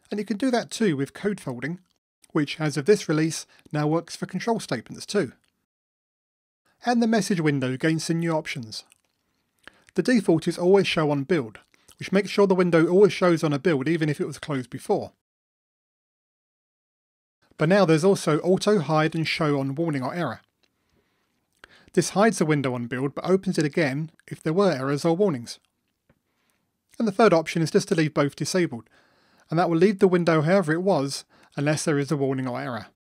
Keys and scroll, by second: 12.7 super+F9, 23.1 super+F9.